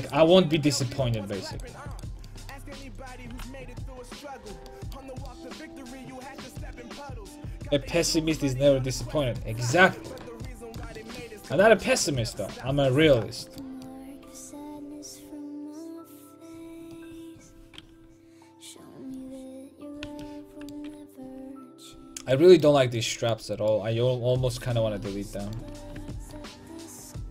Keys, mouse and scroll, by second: 0.1 a, 1.6-4.5 right drag, 3.4 g, 4.6 a, 9.6 middle click, 11.7-13.0 middle drag, 18.7 l, 20.1 a, 20.4-22.0 middle drag, 26.0 Tab, 27.2 middle click.